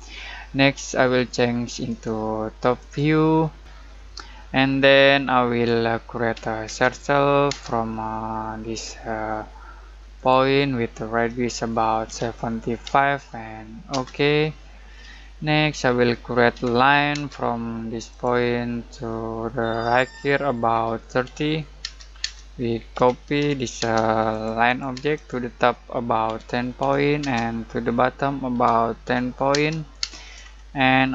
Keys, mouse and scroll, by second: 1.8 click, 3.7 scroll down 1, 4.3-6.6 middle drag, 6.6 c, 7.5 space, 10.1 click, 12.0 7, 13.9 space, 14.8 scroll down 1, 15.1 middle click, 15.6 scroll up 1, 16.1 middle click, 16.5 l, 17.1 space, 18.1 click, 20.7-21.8 typing, 22.9-23.8 typing, 24.3 click, 24.9 space, 25.1 click, 26.2-27.2 typing, 28.5-29.5 typing, 30.4 scroll up 1.